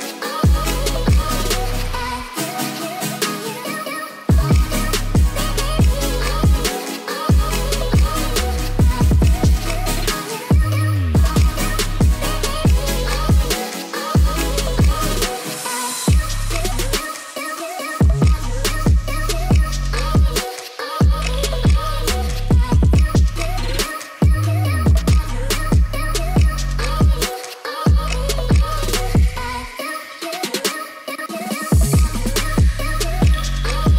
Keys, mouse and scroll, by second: 0.9 shift+a, 2.9 right click, 3.6 shift+middle drag, 4.3 s, 4.8 click, 5.1 g, 5.4 x, 5.7-6.0 drag, 6.1 shift+middle click, 6.7 s, 7.3 shift+middle click, 7.7-8.8 drag, 9.4 click, 10.6 g, 11.4 middle click, 11.7 shift+middle click, 12.2 y, 13.0-13.5 drag, 13.8 g, 14.0 z, 15.2 KP_1, 16.0 s, 17.3 shift+click, 17.7 g, 17.8 z, 19.7 click, 19.8 Tab, 20.2 click, 20.7 g, 20.9 z, 22.0 click, 22.3 g, 22.5 z, 24.7 click, 24.8 Tab, 25.3 shift+click, 25.7 ctrl+s, 26.4 Tab, 27.7 shift+click, 28.3 g, 28.4 z, 30.2 click, 30.3 Tab, 31.1 shift+middle click, 32.4 click, 32.6 middle drag, 32.9 ctrl+s, 33.2 middle click, 33.6 shift+click.